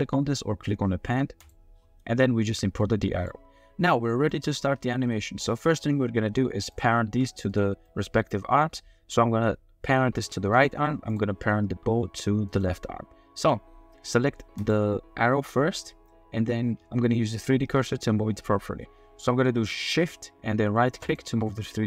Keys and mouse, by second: 2.8-3.2 drag, 4.1 click, 4.6-5.6 shift+drag, 6.7 click, 7.0 g, 7.5 click, 7.8-8.2 middle drag, 8.2 drag, 8.5 middle drag, 10.2 g, 10.5-11.1 drag, 11.8 g, 12.4 click, 14.6 click, 17.1 shift+middle click, 21.0 shift+click, 21.5-21.8 middle drag.